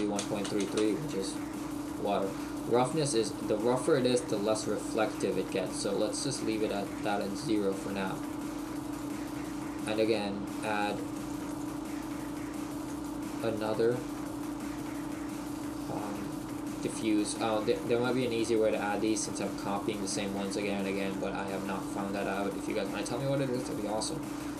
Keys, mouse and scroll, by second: 3.0 click, 6.5 click, 17.9 click, 21.5 click.